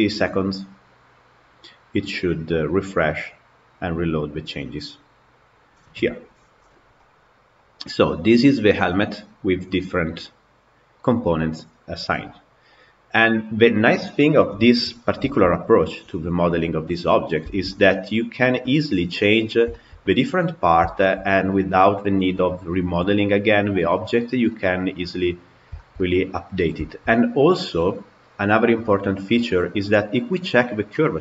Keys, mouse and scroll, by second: 6.8-11.0 middle drag, 14.8 scroll down 2, 15.1-23.9 shift+middle drag, 24.4-25.4 middle drag, 25.4 scroll up 2, 25.6-29.3 shift+middle drag, 29.3 click, 30.2-31.2 middle drag.